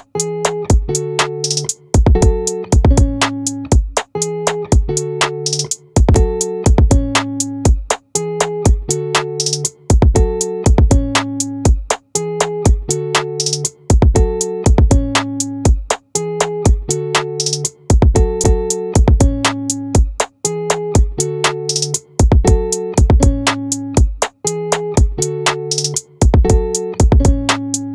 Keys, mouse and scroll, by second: 6.5 middle click, 8.3-9.9 drag, 18.9-21.9 drag, 24.3 ctrl+r.